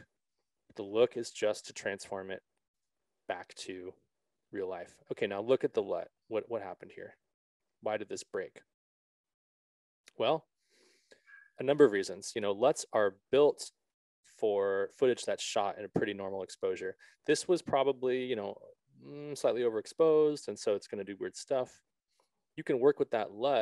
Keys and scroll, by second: 22.9 s.